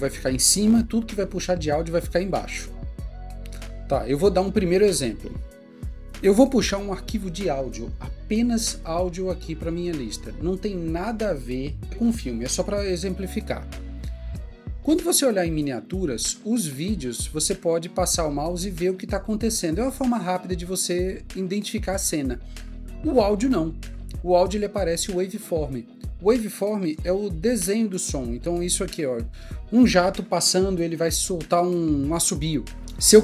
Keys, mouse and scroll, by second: 2.7 Escape, 9.7 click.